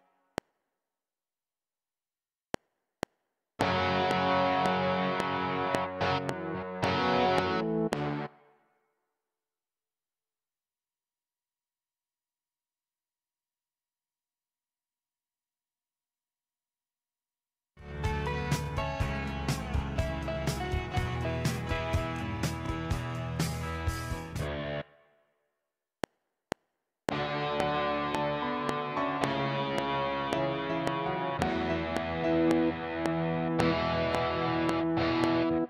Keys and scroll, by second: 0.4 space, 0.9 Right, 2.4 F7, 8.2 space, 17.8 space, 24.2 space, 25.9 F7.